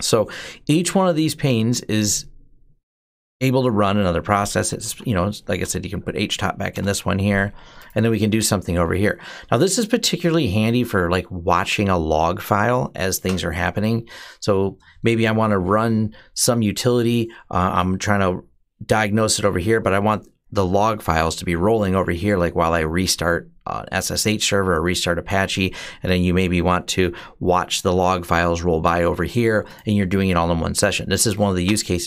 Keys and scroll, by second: 4.2-6.2 typing, 6.5 Return, 13.3 BackSpace, 13.8 BackSpace, 13.8-14.2 BackSpace.